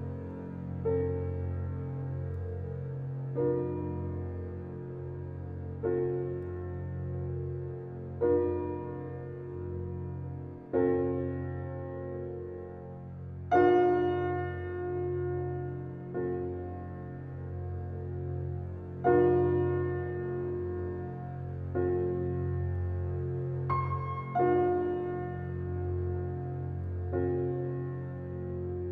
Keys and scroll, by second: 0.2 Left, 2.7 Left, 5.8 Left, 14.5 Left, 17.4 Left, 19.0 Left, 20.6 Left, 22.0 Left, 23.3 Left, 25.3 Left, 26.7 Left, 28.0 Left.